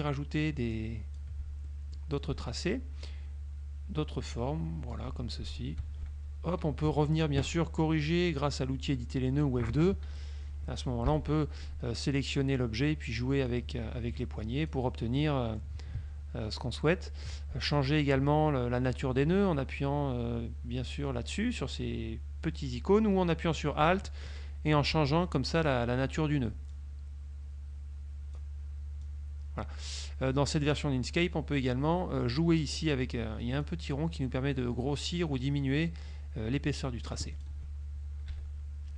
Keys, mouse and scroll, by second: 0.9 shift+click, 1.8 shift+middle click, 3.1 shift+click, 6.5 F2, 8.2 click, 9.5 click, 11.2 Delete, 13.6 click, 15.3 middle click, 17.8 ctrl+click, 25.7 ctrl+click, 26.8 ctrl+click, 29.1 click, 33.7 click, 38.4 -.